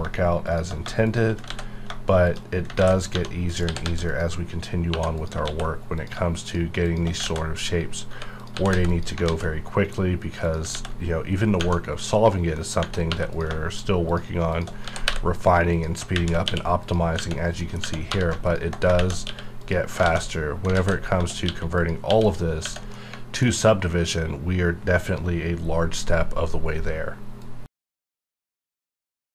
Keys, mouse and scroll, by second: 0.5 shift+click, 1.0 shift+click, 1.5 ctrl+x, 2.3 shift+click, 2.8 ctrl+x, 3.1 1, 3.5 click, 3.6 g, 3.8 g, 4.1 click, 4.9 2, 5.2 click, 5.4 ctrl+x, 6.0 click, 6.4 shift+click, 7.2 ctrl+x, 8.1 1, 8.4 click, 8.5 g, 8.7 g, 8.9 click, 9.3 alt+x, 9.8 scroll down 1, 10.4 click, 10.7 ctrl+x, 12.5 middle click, 12.8-13.1 scroll up 1, 13.1 3, 13.3 click, 14.8 g, 15.1 y, 15.7 click, 16.1 shift+`, 16.4 q, 16.8 click, 17.2 Tab, 17.3 scroll down 1, 17.6 middle click, 18.1 3, 18.4 alt+click, 19.0 shift+`, 19.3 q, 19.6 click, 20.0 alt+a, 20.7 ctrl+z, 21.5 q, 21.8 click, 22.1 q, 22.2 click, 22.6 Tab, 22.9 middle click, 23.5 scroll down 1, 24.7-25.0 scroll up 1.